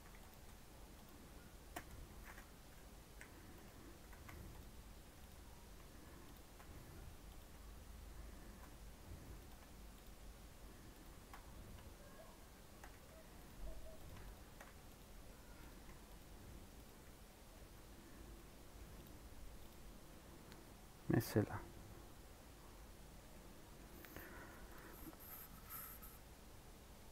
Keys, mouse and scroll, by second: 3.5 c, 4.0 a, 4.5 click, 4.9 3, 5.2 click, 6.3 shift+click, 7.3 x, 8.4 Tab, 8.9 Tab, 9.4 click, 9.9 shift+click, 10.9 shift+Left, 13.4 x, 14.0 Left, 14.9 x, 15.7 click, 16.2 x, 16.8 click, 17.5 Tab, 18.1 scroll down 4, 18.3 middle click, 19.0 click, 19.2 scroll up 2, 19.7 click, 20.1 middle click, 20.4 scroll up 1, 20.8 middle click, 21.6-22.1 scroll up 3, 22.3-22.6 scroll down 4, 22.6 scroll up 1, 22.7-24.1 middle drag, 24.1 scroll down 4, 24.3 middle click, 24.7 click, 25.6 middle click, 26.2 scroll up 2.